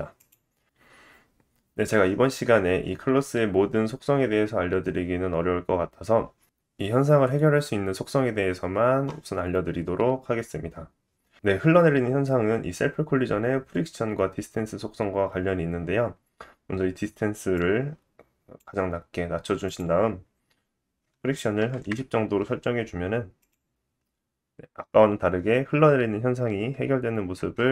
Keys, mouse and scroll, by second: 3.0-4.1 scroll down 2, 4.1 scroll down 1, 5.2 scroll up 4, 10.3-10.7 scroll up 4.